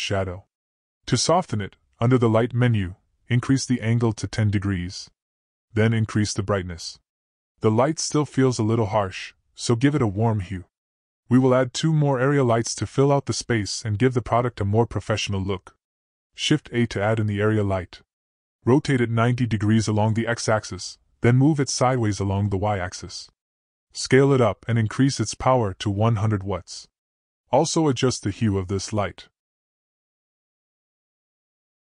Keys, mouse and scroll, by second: 2.0 click, 3.5-7.5 drag, 8.6-10.0 middle drag, 11.6 click, 15.5-16.7 middle drag, 17.3 shift+a, 19.3 middle click, 20.4 r, 23.3 g, 26.1 s, 28.8 click, 29.7 0, 29.9-30.9 drag.